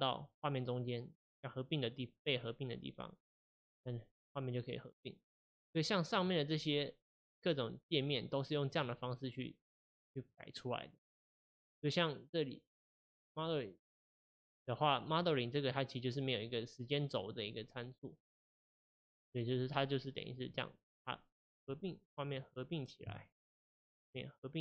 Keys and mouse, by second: 6.2 click, 8.2 click, 9.8 click, 13.2-15.2 drag, 18.9 click, 21.6-24.6 drag.